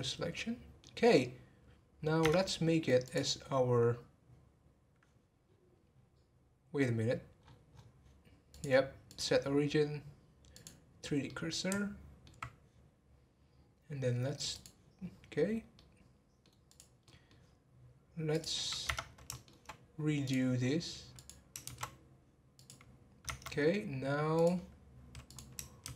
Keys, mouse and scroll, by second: 0.3-2.2 middle drag, 2.2 Tab, 3.0-5.5 drag, 5.5-5.8 scroll down 3, 7.4-7.8 scroll up 10, 8.5-11.3 drag, 11.3-14.4 middle drag, 14.5 click, 15.0 scroll down 1, 15.7-16.7 middle drag, 16.7 click, 17.0-18.3 middle drag, 18.3 click, 19.3 shift+middle click, 20.2-21.3 drag, 24.4-25.4 drag.